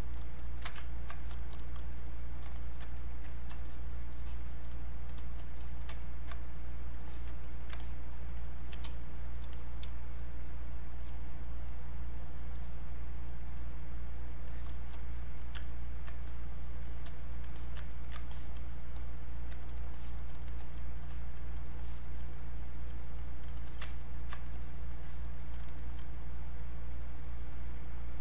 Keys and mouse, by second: 0.9 ctrl+right click, 1.3 click, 3.0 ctrl+right click, 3.7 shift+click, 5.6 alt+click, 6.1 ctrl+right click, 6.3 click, 7.4 ctrl+right click, 7.8 ctrl+click, 8.8 space, 9.1 click, 9.3 space, 9.5 click, 9.8 space, 10.2 click, 10.4 space, 11.3 click, 11.6 click, 15.6 ctrl+right click, 16.3 click, 17.6 alt+click, 17.9 ctrl+right click, 18.3 ctrl+alt+click, 19.0 click, 20.6 alt+click, 21.1 alt+click, 21.8 alt+click, 22.7 alt+click, 23.5 alt+click, 24.0 ctrl+right click, 24.9-28.2 alt+drag.